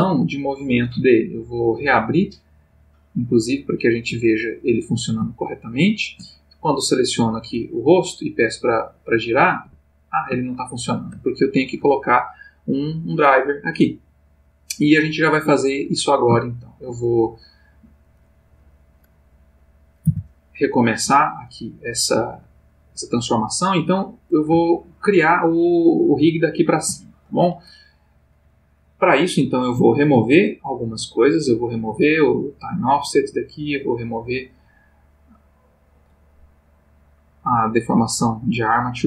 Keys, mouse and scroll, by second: 1.7 click, 3.1 click, 3.8 click, 6.7 click, 8.2-10.3 drag, 9.6 Escape, 10.5-11.2 shift+middle drag, 11.4 ctrl+shift+middle click, 13.5 click, 16.4 shift+middle click, 19.3 click, 20.1 r, 21.0 Escape, 21.6 click, 26.9 shift+middle click, 29.4 click, 31.7 click, 33.6 click, 35.3 click, 36.9 click, 38.2 click.